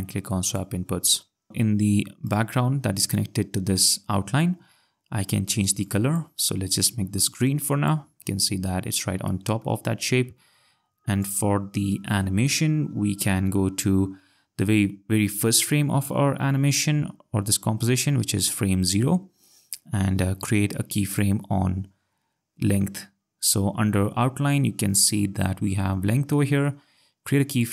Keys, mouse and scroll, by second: 0.4 click, 2.2 click, 5.8 click, 7.3 click, 8.5 ctrl+scroll, 9.3 click, 11.0 scroll, 11.2 click, 21.1 click, 27.5 click.